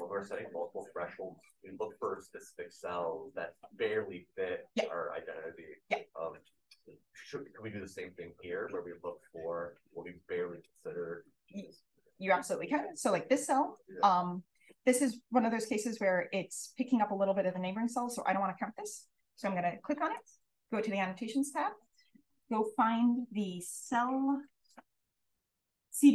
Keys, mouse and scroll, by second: 0.6 click, 1.7 d, 6.0 scroll up 1, 9.4 click, 10.0 d, 13.6 click, 13.8 click, 15.0 d, 15.6 d, 22.4 click, 22.7-23.5 scroll up 1.